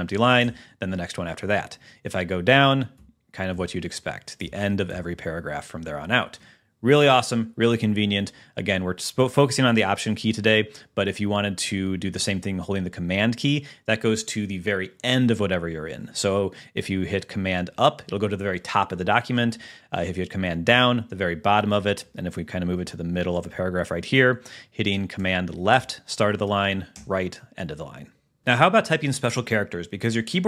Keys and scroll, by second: 0.5 alt+Up, 2.8 alt+Down, 17.8 super+Up, 20.7 super+Down, 22.2 Up, 23.3 Down, 27.2 super+Right.